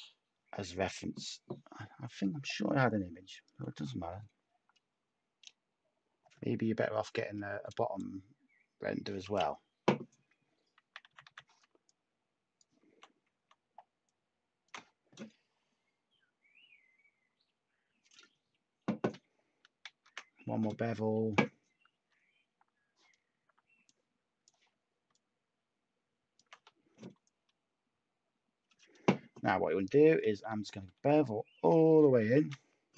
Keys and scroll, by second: 11.0 b, 11.2 b, 19.9 ctrl+z, 30.2 b, 30.4 b.